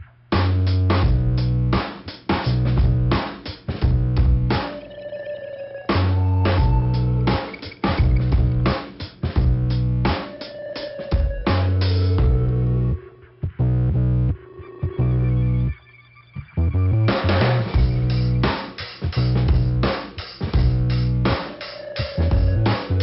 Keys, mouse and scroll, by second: 0.1 click, 1.5 click, 2.4 middle click, 5.0 scroll up 2, 5.2 click, 6.7 right click, 7.3 click, 8.5 click, 8.6 click, 9.9 click, 11.3 click, 13.6 right click, 14.7 click, 16.1 click, 17.0 scroll down 1, 18.1 scroll down 1, 18.4 middle click, 19.0 click, 20.1 right click, 20.8 click, 22.1 click.